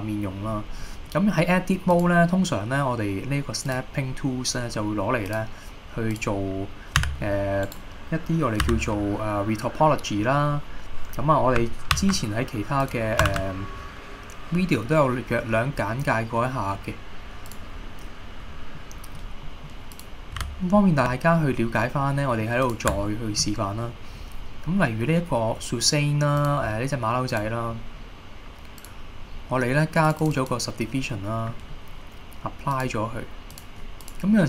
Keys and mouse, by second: 0.1 middle click, 2.0-3.3 drag, 5.4 click, 6.2 click, 7.1 g, 7.7 right click, 8.7 h, 10.3 middle click, 12.1 ctrl+a, 13.4 shift+a, 18.8-19.2 middle drag, 19.6 middle click, 20.0 click, 20.5 h, 21.0 shift+middle click, 22.1 middle click, 23.1 shift+middle drag, 26.5 click, 30.2 click, 31.2 middle click, 33.0-33.8 drag.